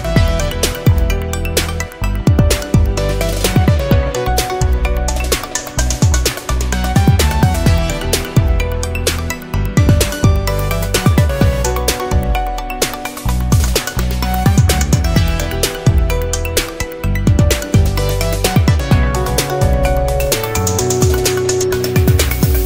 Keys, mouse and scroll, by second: 1.6 middle click, 2.5 click, 3.6 click, 6.6 click, 10.7 click, 11.8 click, 12.4 click, 12.9-15.1 middle drag, 15.8 scroll up 2, 16.2 scroll down 2, 16.5-18.7 drag, 19.1-19.6 scroll up 2, 19.6 scroll down 2, 21.6 click.